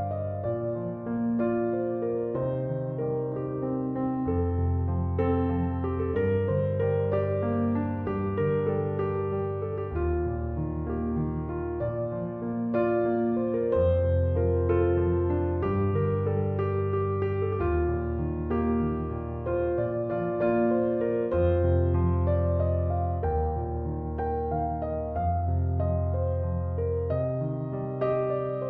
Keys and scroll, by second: 5.5-6.8 typing, 21.9-23.7 typing.